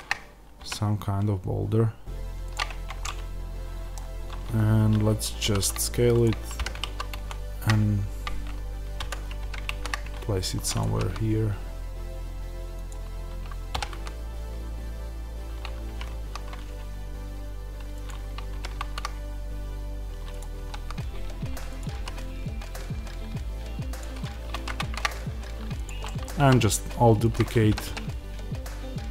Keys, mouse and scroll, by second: 0.5 g, 2.6 Tab, 3.0-6.1 middle drag, 5.3 s, 6.1 click, 6.5 g, 9.0 Escape, 9.4 g, 10.7 click, 12.8 click, 13.7 r, 18.0 click, 18.5 g, 20.3 click, 20.4 r, 21.7 click, 21.8 g, 23.9 click, 25.7 click, 25.9 middle click, 26.3 s, 27.2 click, 27.6 r.